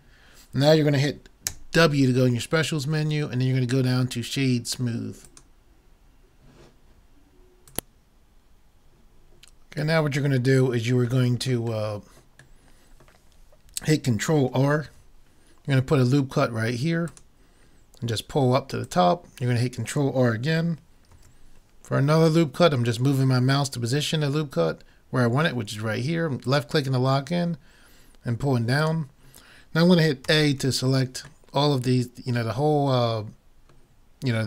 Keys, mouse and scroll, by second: 1.5 w, 10.1-11.6 middle drag, 11.7-12.8 middle drag, 14.9 ctrl+r, 21.1 ctrl+r, 30.2 a, 30.6 a.